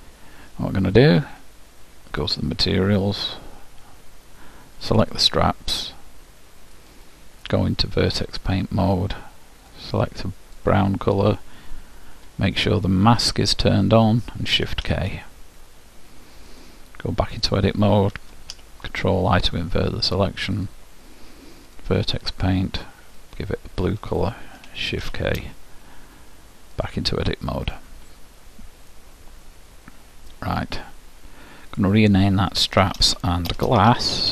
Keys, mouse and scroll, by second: 2.2-4.1 drag, 5.2-6.8 drag, 8.5 click, 9.8-11.8 drag, 13.3-15.0 drag, 14.8 shift+k, 17.5 click, 18.6 ctrl+i, 21.8 click, 23.2-25.0 drag, 25.0 shift+k, 27.8-28.8 drag, 31.8-33.8 drag.